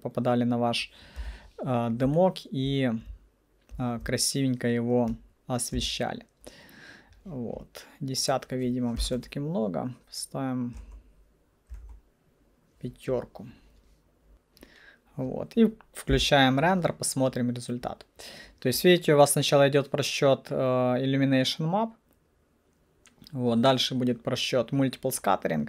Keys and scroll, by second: 1.3 p, 5.9 c, 9.1 2, 9.2 Return, 10.9 3, 10.9 Return, 11.8 5, 11.9 Return, 14.1-14.8 typing, 20.1 F9.